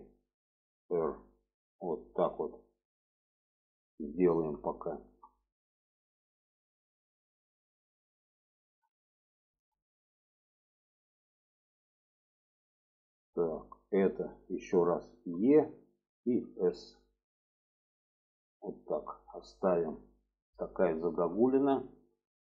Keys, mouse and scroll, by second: 0.8 r, 2.5-3.8 drag, 4.5 shift+click, 5.0 shift+middle click, 6.0 click, 7.0 click, 8.2 click, 9.4 shift+middle click, 10.4 click, 11.2 click, 13.1 shift+middle click, 13.9 click, 15.3 e, 16.7 s, 18.2 click, 19.6 click, 21.1 shift+middle click, 21.9 shift+middle click.